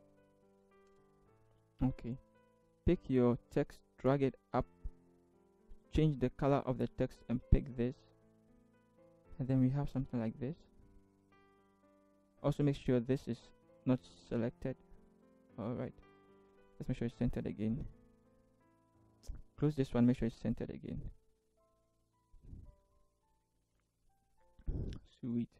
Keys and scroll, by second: 0.5 Right, 0.9 Return, 17.2 ctrl+t, 20.4 ctrl+t, 21.7 Right, 22.2 Right, 22.4 Right, 23.3 Left, 23.7 Return.